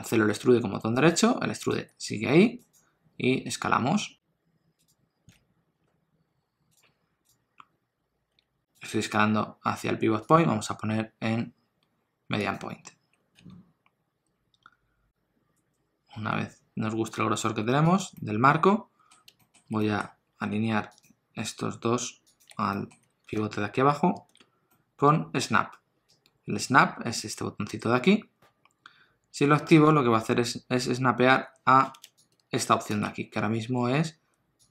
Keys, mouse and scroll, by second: 1.7 g, 3.4 s, 5.3 alt+s, 8.3 s, 10.2 click, 13.3 s, 18.2 middle click, 19.4 shift+middle click, 19.8 middle click, 20.4 1, 21.0 click, 22.3 shift+click, 22.7 shift+middle click, 23.3 alt+z, 24.1 alt+z, 24.7 middle click, 29.8 click, 34.6 click.